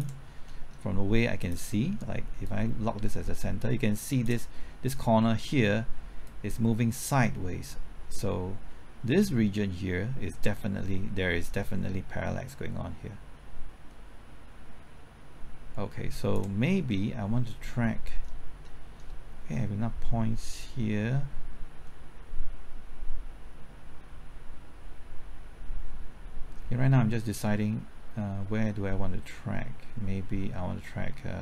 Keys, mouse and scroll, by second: 0.2 scroll up 1, 0.5 middle click, 1.4-16.6 drag, 16.9-18.6 middle drag, 20.6-31.4 drag.